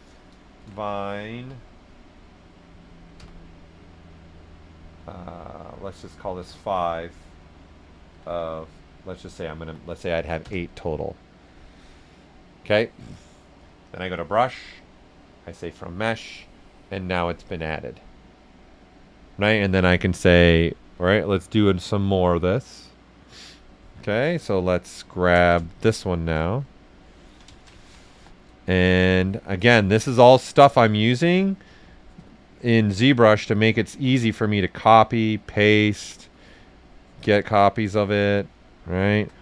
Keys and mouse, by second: 0.3 click, 0.6-1.4 typing, 5.1 e, 6.4 5, 7.9-9.6 typing, 10.4 Return, 12.2 Return, 13.8 click, 13.8 click, 24.3 right click, 25.4 ctrl+shift+click, 26.0 ctrl+shift+a, 27.2 ctrl+click, 27.8 ctrl+shift+click, 28.1 w, 28.4 right click, 29.5 alt+click, 30.6 ctrl+click, 31.3-32.9 ctrl+right drag, 32.9 alt+click, 33.7-35.4 drag, 35.4 right click, 36.5-38.2 drag, 38.2-39.4 right drag, 38.9 r.